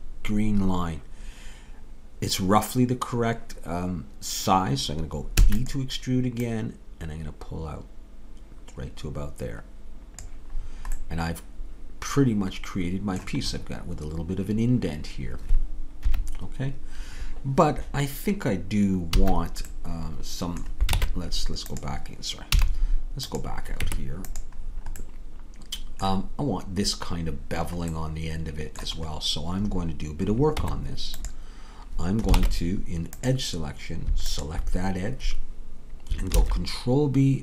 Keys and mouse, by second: 5.4 e, 6.5-8.8 drag, 11.0 middle click, 11.8 middle click, 15.1 middle click, 16.0 KP_3, 16.2 middle click, 19.2 a, 21.0 ctrl+Tab, 22.6 z, 23.8 Tab, 24.7-27.1 middle drag, 28.4-30.6 middle drag, 30.6 Tab, 32.4 ctrl+Tab, 35.1 click, 36.3 ctrl+b.